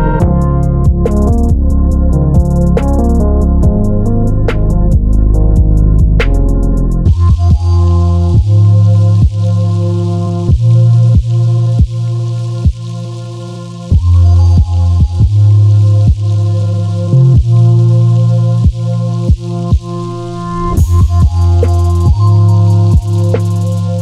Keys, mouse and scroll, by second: 0.3 right click, 0.7 Escape, 0.8 middle click, 1.4 ctrl+r, 3.2 right click, 3.5 click, 3.6-5.9 middle drag, 4.2 ctrl+z, 4.6 ctrl+z, 5.7 Tab, 5.9 click, 6.2 middle click, 7.1 click, 7.4 middle click, 8.1 shift+right click, 8.5 shift+a, 9.7 s, 10.6 click, 10.8-13.0 middle drag, 11.7 KP_3, 12.3 g, 13.0 click, 13.1-15.0 middle drag, 13.9 g, 15.0 click, 15.6-17.5 middle drag, 16.5 g, 17.5 click, 17.7-20.9 middle drag, 18.9 shift+d, 20.9 click, 21.3 s, 23.3 click.